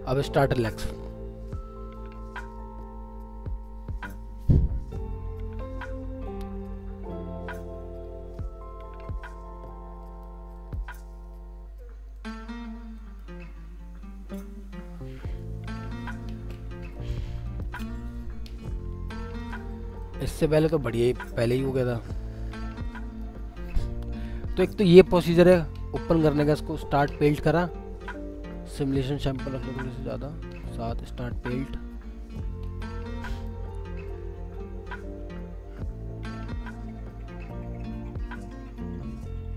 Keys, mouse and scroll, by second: 14.0 scroll down 1, 19.2-20.0 scroll up 1, 30.0 double click.